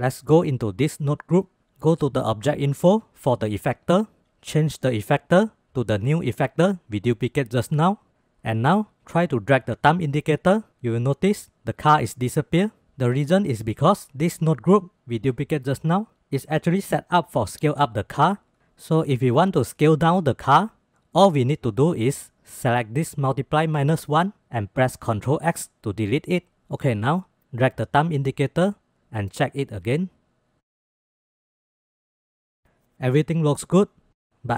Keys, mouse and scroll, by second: 1.2 click, 2.2 click, 2.9-4.0 drag, 5.0 click, 5.5 click, 9.4-12.8 drag, 19.6 click, 21.0-21.6 drag, 22.0-24.1 drag, 25.1 ctrl+x, 27.3-27.7 shift+drag, 28.3-33.3 drag, 33.4 space, 34.5 space.